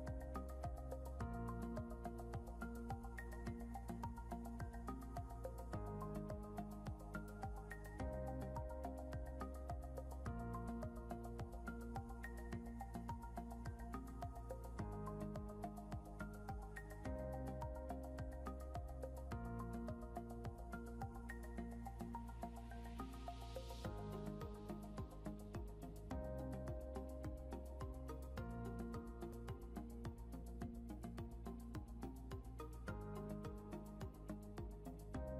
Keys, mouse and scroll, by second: 0.5 scroll up 1, 4.9 scroll, 4.9 scroll down 1, 10.3 Delete, 11.6 scroll up 1.